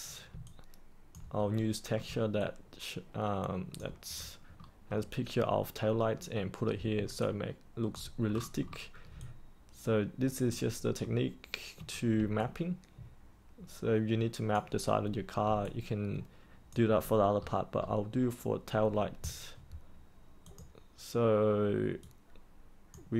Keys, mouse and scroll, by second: 0.4 alt+click, 1.5 middle click, 2.0-2.3 scroll up 1, 2.3 alt+click, 4.1-4.5 scroll up 1, 4.5 middle click, 7.2 alt+click, 8.2-9.0 scroll down 1, 9.1-10.4 alt+drag, 11.0 middle click, 12.3-14.5 alt+drag, 15.6 alt+click, 17.3-19.7 scroll up 1, 20.4-23.1 drag.